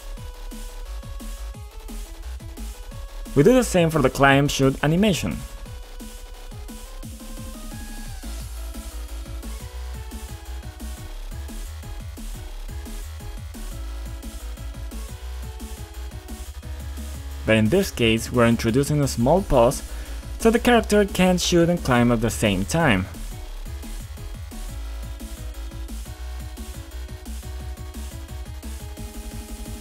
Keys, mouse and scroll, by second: 0.1 click, 2.1 click, 2.7 ctrl+click, 3.3 ctrl+click, 4.0 click, 4.1 click, 5.3-7.5 typing, 8.7-10.3 typing, 11.0 Return, 12.5 click, 12.6 double click, 13.6-15.6 typing, 16.1 click, 16.5 scroll up 2, 17.1 scroll up 1, 17.6 scroll up 1, 18.2 scroll down 2, 20.0 scroll up 2, 20.8 scroll up 1, 21.5 scroll up 1, 23.2-23.8 scroll up 1, 24.2 scroll up 1, 26.5 click, 29.7 scroll down 2.